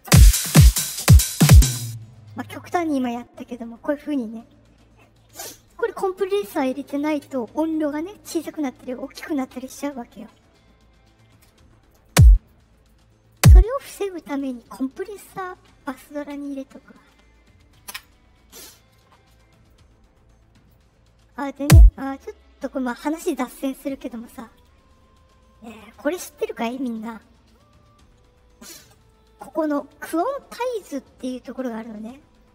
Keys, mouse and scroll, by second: 1.6 space, 11.9 click, 12.7 right click, 13.2 click, 14.0 right click, 19.6 click, 21.5 click, 24.4 right click.